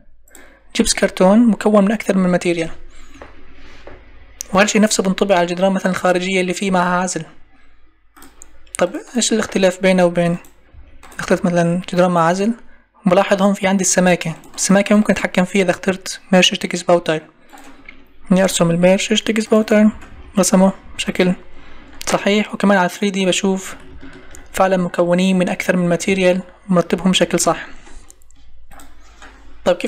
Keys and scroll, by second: 3.9 Escape, 6.6 Escape, 10.7 Escape, 19.9 Escape.